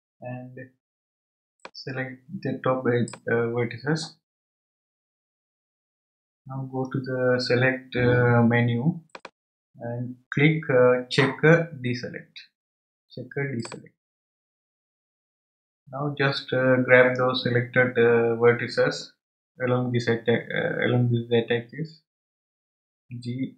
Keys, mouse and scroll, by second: 9.1-12.2 drag, 15.8-18.8 scroll up 1.